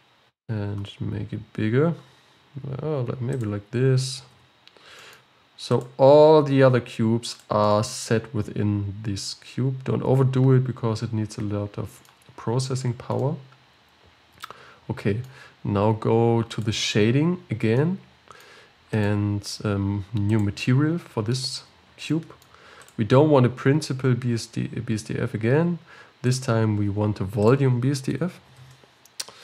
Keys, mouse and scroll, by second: 0.5 s, 4.4 g, 6.6 s, 7.7-11.4 middle drag, 13.3-16.6 middle drag, 16.6 click, 17.5-17.8 scroll down 2, 17.8-19.1 middle drag, 19.1 click, 20.5-23.0 drag, 25.9 x.